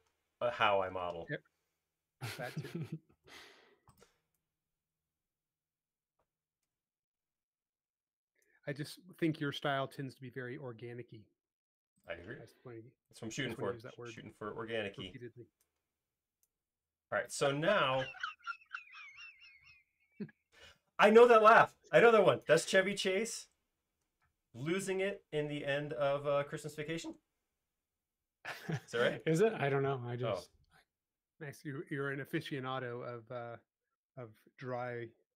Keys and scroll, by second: 3.6 s, 9.2 super+z, 17.1 space, 28.8 q.